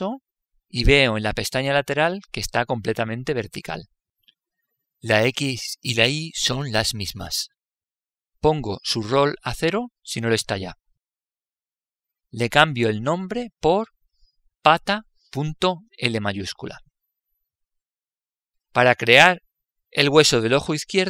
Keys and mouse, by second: 1.1 right click.